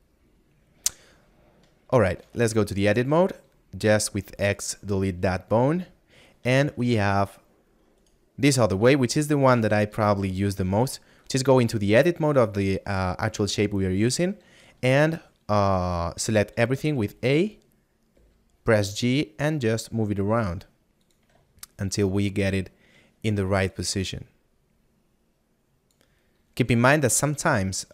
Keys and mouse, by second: 1.4 middle click, 7.0 middle click, 9.8 middle click, 18.2 g, 21.0 click, 22.2 shift+middle click, 24.1 click.